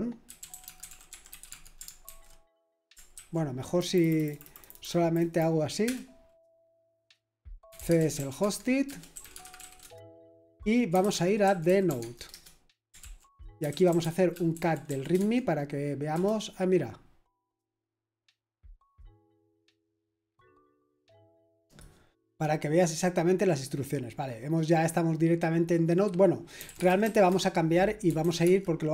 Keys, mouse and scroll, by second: 21.6 click, 26.3-28.9 typing.